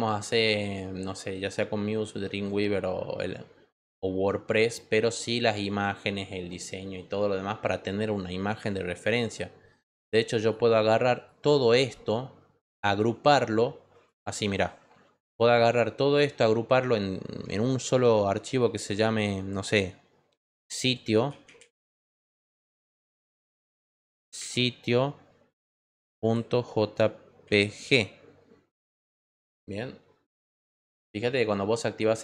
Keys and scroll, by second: 17.8 ctrl+g, 20.9-22.1 typing, 23.4-24.5 typing, 26.2 ., 26.6 j, 27.9 g.